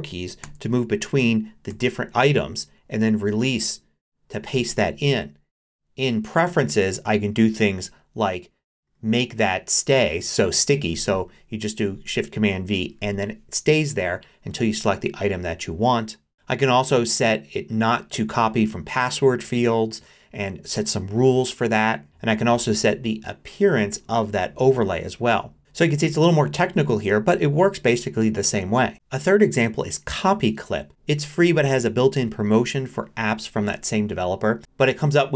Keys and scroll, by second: 0.4 shift+super+Left, 1.2 shift+super+Right, 28.9 alt+super+2.